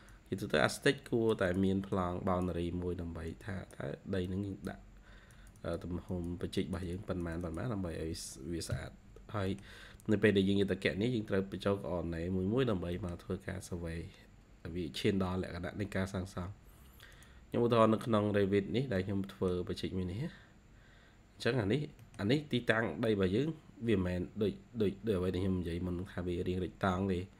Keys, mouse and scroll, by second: 5.5 double click, 6.0 double click, 8.3 ctrl+q, 8.6 Escape, 9.1 scroll down 1, 10.9-12.2 scroll up 2, 12.5-12.9 scroll down 2, 12.9 middle click, 17.9 scroll up 2, 18.9 middle click, 20.1 scroll up 2, 20.7-21.3 scroll up 4, 21.5-22.3 scroll down 6, 21.9 middle click, 22.6-24.0 scroll up 3, 24.0-24.6 scroll down 4, 27.0-27.3 scroll up 6.